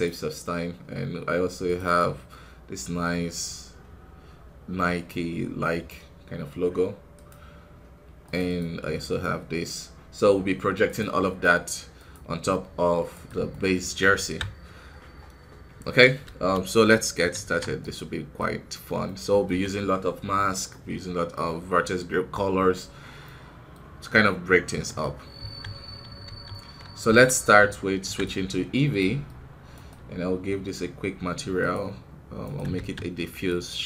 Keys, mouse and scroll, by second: 0.0 shift+middle click, 12.0 click, 12.5 scroll up 1, 13.1 right click, 13.4 shift+middle click, 14.2 alt+a, 14.4 scroll down 4, 15.7-17.7 scroll up 1, 17.7-19.0 right drag, 19.0-23.8 middle drag, 23.8-24.9 scroll up 1, 24.9 right click, 26.2 x, 27.0 KP_1, 28.1 z, 28.9 middle click, 29.7-31.7 right drag, 31.7 click, 32.5 right click.